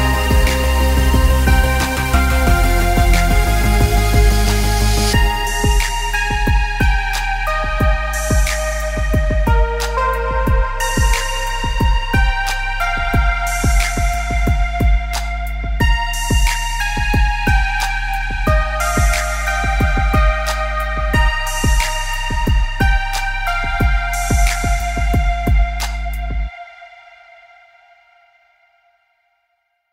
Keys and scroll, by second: 22.9 ctrl+space.